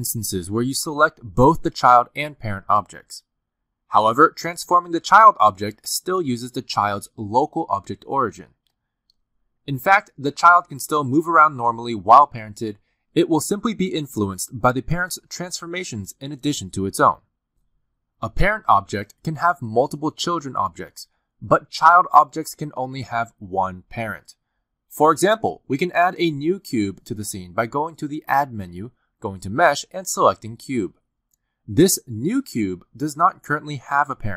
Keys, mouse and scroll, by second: 2.2 shift+click, 2.9 r, 6.5 click, 6.8 r, 8.6 g, 11.9 g, 14.0 click, 14.2 g, 15.2 click, 15.3 g, 16.0 click, 16.2 g, 17.3 click, 17.5 g, 18.5 click, 18.7 g, 20.4 g, 22.3 click, 23.2-23.6 scroll down 2, 25.5 click, 26.1 g, 28.1 g, 29.8 click, 33.0 g.